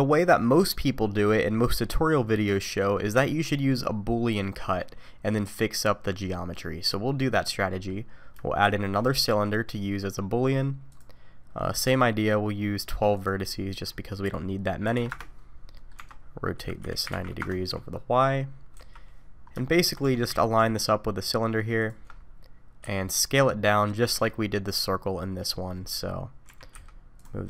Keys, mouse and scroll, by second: 3.1 middle click, 4.8 middle click, 6.4 middle click, 7.7 middle click, 8.6 shift+a, 11.8 click, 13.2 click, 15.8 middle click, 16.0 Tab, 16.6 r, 18.7 KP_3, 19.7 shift+middle click, 20.0 g, 22.1 scroll up 4, 22.8 s, 24.3-25.2 scroll down 2, 25.2 scroll down 2, 25.3-25.9 scroll up 2, 25.7 middle click, 26.2-27.2 scroll down 2, 26.5 g.